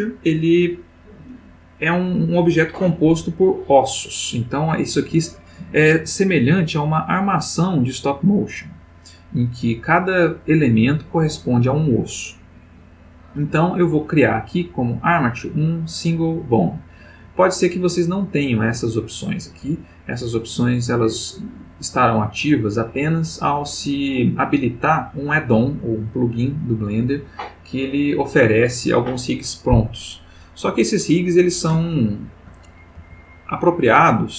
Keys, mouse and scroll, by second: 30.9 click, 31.9-32.7 ctrl+middle drag, 33.0 g, 33.5 click, 34.0-34.3 middle drag.